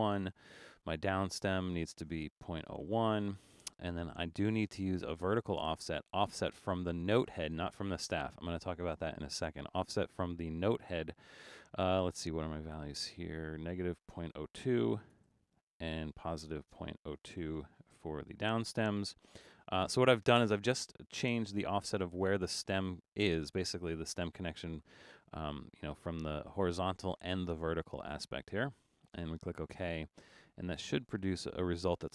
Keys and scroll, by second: 0.0-0.3 typing, 1.5-3.3 typing, 14.5-15.8 typing, 17.1-18.0 typing.